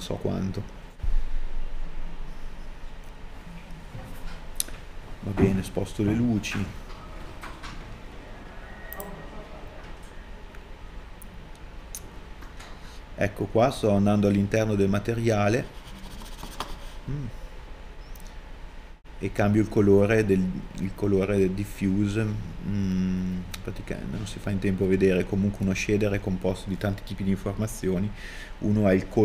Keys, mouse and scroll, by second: 6.6 KP_1.